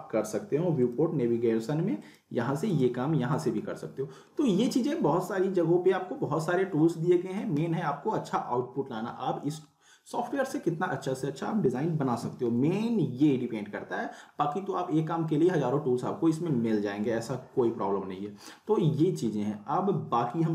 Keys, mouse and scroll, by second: 3.4 click.